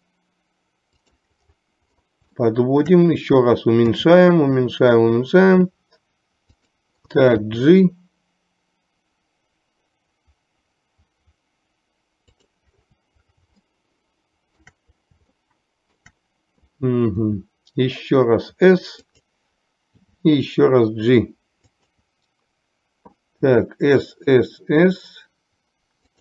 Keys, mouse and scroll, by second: 2.5-3.1 shift+middle drag, 4.0 s, 7.6 g, 13.9-14.7 shift+middle drag, 15.5-16.2 shift+middle drag, 17.4 s, 20.0 g, 23.6 s.